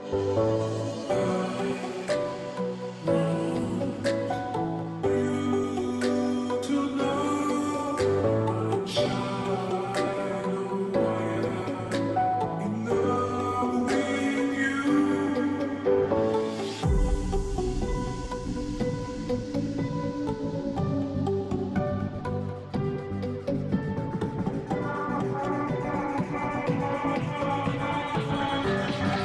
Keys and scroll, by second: 28.6 ctrl+t.